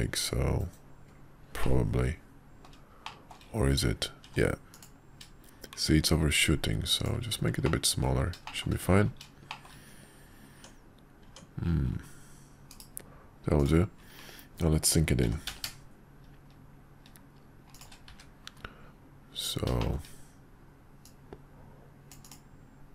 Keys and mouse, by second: 1.6-2.7 middle drag, 3.0 shift+middle click, 4.2 q, 7.6-8.1 middle drag, 8.4 shift+middle click, 9.5 shift+middle click, 10.5 Tab, 11.2 Tab, 12.7 /, 13.6 click, 15.2 g, 18.1 `, 19.8-22.4 shift+middle drag.